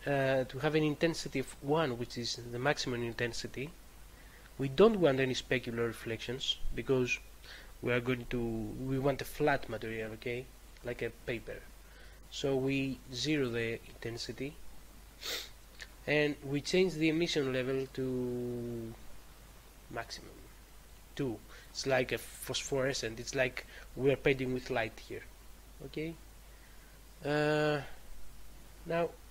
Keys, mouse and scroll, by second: 1.5 click, 10.6 click, 17.8 click.